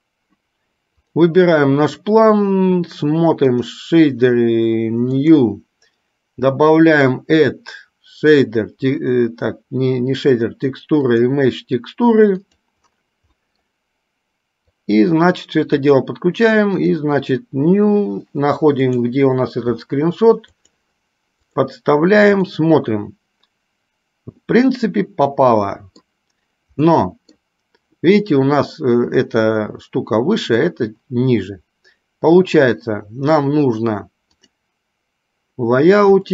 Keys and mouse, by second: 1.1 click.